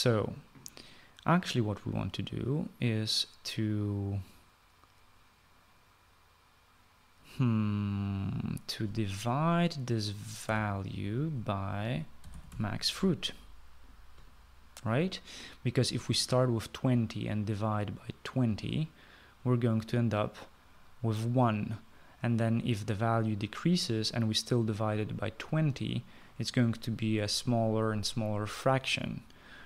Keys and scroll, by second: 11.4 /, 13.0-13.9 typing.